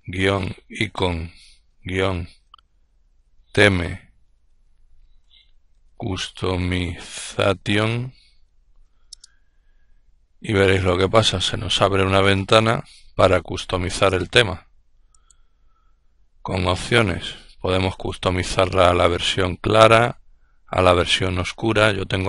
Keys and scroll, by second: 0.0-2.8 typing, 4.3-8.1 typing, 8.5 Return, 9.5 typing.